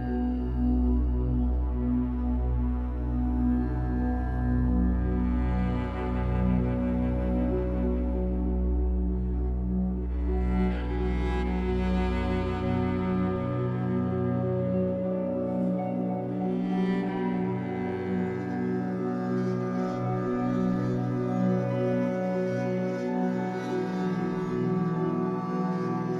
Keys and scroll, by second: 6.0 2, 7.6 Escape, 8.7 2, 17.1 w, 18.2 alt+x, 19.2 alt+x.